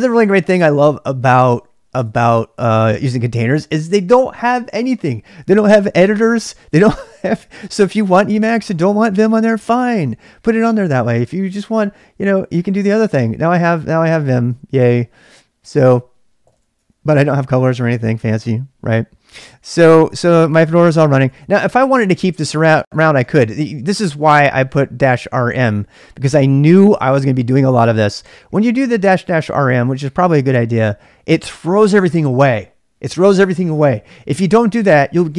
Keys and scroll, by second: 0.0-0.7 typing, 1.9 typing, 13.8-14.6 typing, 16.2-17.3 typing, 19.2-25.0 typing.